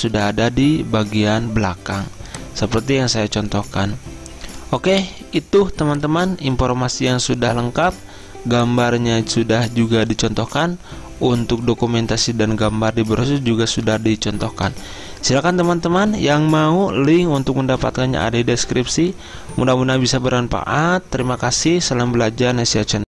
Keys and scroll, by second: 1.9 z.